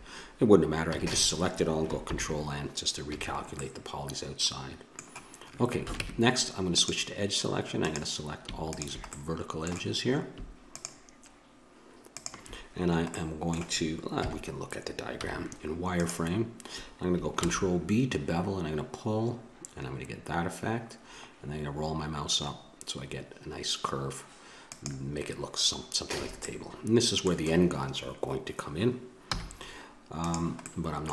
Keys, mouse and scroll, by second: 0.9 a, 1.1 a, 2.1 ctrl+n, 3.0 a, 6.0 ctrl+Tab, 7.7-9.1 drag, 9.1 middle click, 9.3-10.6 drag, 10.7-13.3 drag, 13.3 middle click, 14.1 KP_7, 15.2 z, 17.4 ctrl+b, 26.1 a, 26.4 middle click, 29.3 z, 30.6-31.1 middle drag.